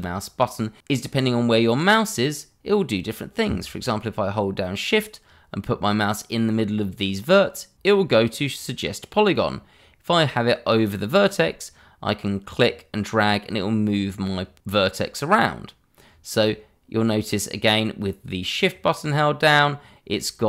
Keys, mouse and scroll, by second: 12.5 click.